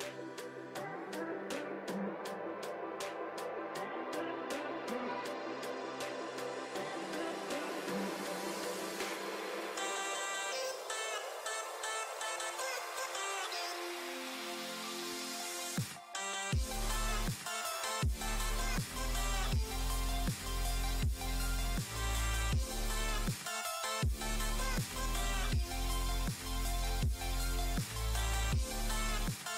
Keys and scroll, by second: 7.6 Down, 8.4 Right, 11.2 BackSpace, 13.6 super+d, 15.1 space, 21.8 space, 23.6 space, 25.1 space.